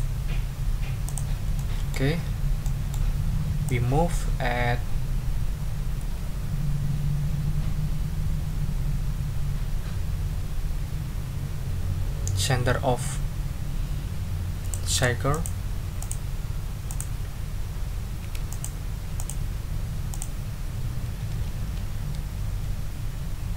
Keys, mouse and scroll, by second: 1.0 ctrl+click, 1.5 ctrl+middle click, 1.8 ctrl+click, 2.2 ctrl+scroll down 2, 2.6 ctrl+click, 3.6-14.9 drag, 15.3 click, 16.0 ctrl+click, 16.9 click, 18.5 shift+click, 19.2 shift+click, 20.1 click, 21.4 Up, 22.5 Down.